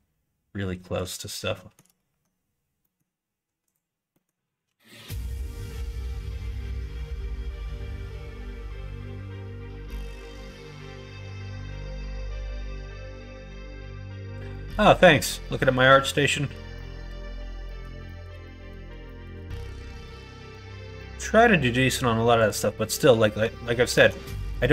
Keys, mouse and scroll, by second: 1.4 shift+middle click, 1.9 Tab, 2.7 middle click, 3.6 click, 4.0 middle click, 4.5 q, 6.4 middle click, 7.6 click, 8.5 q, 9.6 middle click, 9.9 Tab, 10.5 middle click, 11.1 click, 11.6 middle click, 12.1 middle click, 12.5 shift+middle click, 12.9 middle click, 13.5 middle click, 14.4 middle click, 14.9 shift+middle click, 15.3 middle click, 15.8 middle click, 16.2 middle click, 16.6 middle click, 17.5 middle click, 17.9 shift+middle click, 18.3 middle click, 18.9 shift+middle click, 19.4 middle click, 19.9 click, 20.1 Tab, 20.9 middle click, 22.3 click, 22.9 middle click, 23.8 alt+z, 24.2 middle click.